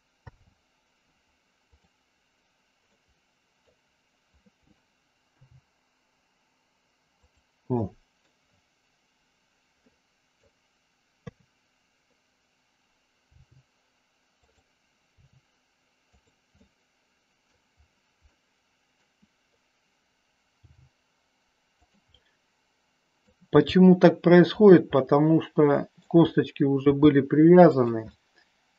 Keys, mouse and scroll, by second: 0.1 alt+p, 2.9 middle click, 5.2 g, 7.2 click, 7.7 middle click, 9.9 middle click, 11.1 KP_3, 13.2 g, 14.3 click, 15.2 r, 16.6 middle click, 18.3 middle click, 20.6 g, 22.1-23.2 middle drag, 23.5 g, 24.5 click, 24.9 scroll up 1, 25.1 middle click, 26.9 g, 27.7 click, 28.1 scroll up 1, 28.2 middle click.